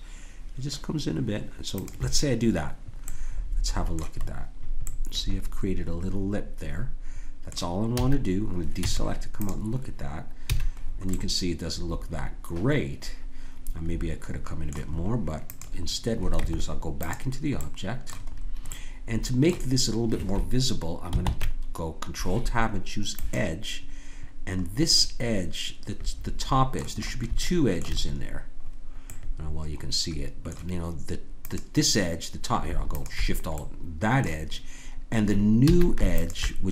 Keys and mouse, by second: 3.0 middle click, 7.9 a, 8.8 Tab, 10.5 a, 11.1 click, 11.6-13.2 middle drag, 15.5-18.4 drag, 16.4 Tab, 21.2 ctrl+Tab, 25.3 middle click, 26.9 middle click, 31.5-34.9 drag, 35.6 a, 36.1-36.7 drag.